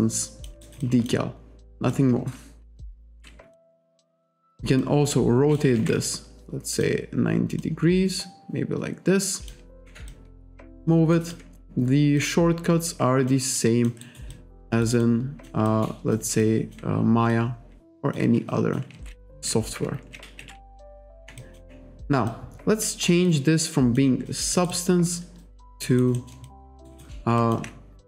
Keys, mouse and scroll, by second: 0.6 alt+right click, 0.8 alt+click, 1.9 click, 3.1 ctrl+z, 3.6 alt+click, 4.0 e, 4.8 click, 6.1 alt+click, 7.6 click, 9.8 w, 10.1 alt+click, 11.2 alt+click, 12.2 click, 13.6 alt+click, 14.4 alt+click, 15.0 alt+click, 15.7 alt+click, 16.4 alt+click, 17.3 click, 18.5 alt+click, 19.0 ctrl+z, 19.4 e, 20.0 ctrl+z, 20.9 alt+click, 21.1 w, 21.4 alt+click, 22.3 click, 23.3 alt+click, 24.3 alt+click, 24.6 alt+right click, 24.7 alt+click, 25.9 alt+right click, 26.5 alt+click, 26.9 alt+right click, 27.4 alt+click.